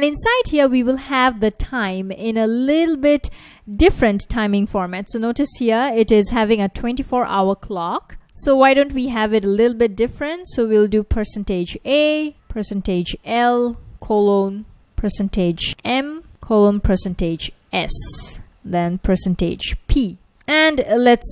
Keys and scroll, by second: 3.1 super+Tab, 7.9 super+Tab, 10.4-16.3 typing, 17.9 shift+s, 18.4 space, 18.8 shift+5, 20.1-21.3 typing.